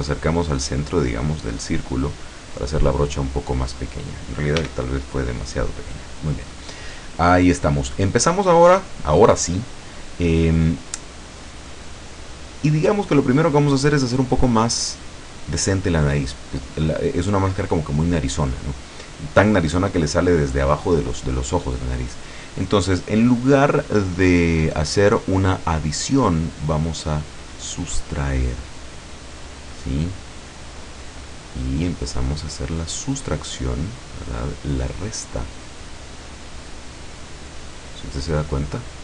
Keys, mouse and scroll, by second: 2.1 click, 4.6 f, 5.4 click, 8.4-10.8 middle drag, 11.1-12.2 scroll up 2, 12.8-15.1 middle drag, 15.1-15.8 scroll up 1, 15.8 middle click, 15.9 scroll up 1, 16.1-19.7 middle drag, 26.6 click, 26.9-27.4 scroll up 1, 27.4 middle click, 28.4-36.6 drag, 36.7-39.0 middle drag.